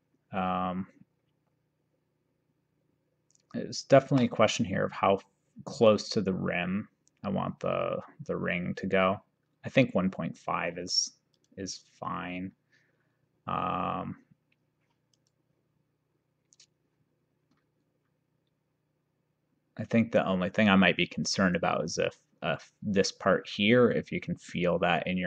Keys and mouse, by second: 0.4 shift+right click, 11.4 click, 15.3 click.